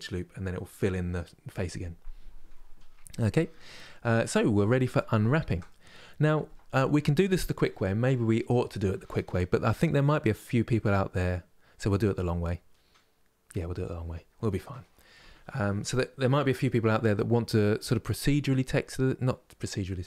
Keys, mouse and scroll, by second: 3.9-20.0 middle drag.